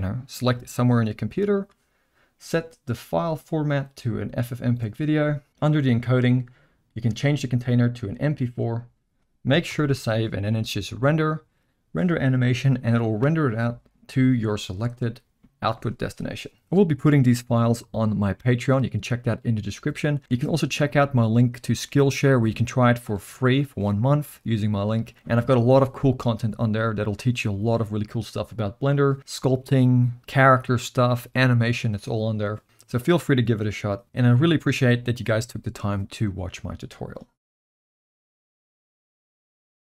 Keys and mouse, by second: 3.3-4.6 drag, 5.7 click, 7.1-8.6 drag, 9.7 ctrl+s, 9.8 ctrl+s, 11.0-14.2 drag.